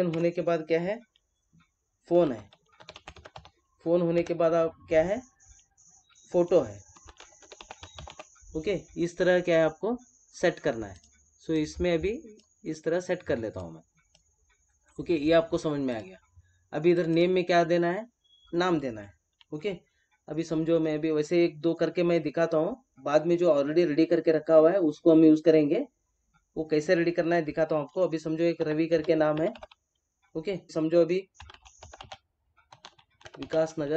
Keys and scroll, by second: 0.1 Tab, 4.1 Tab.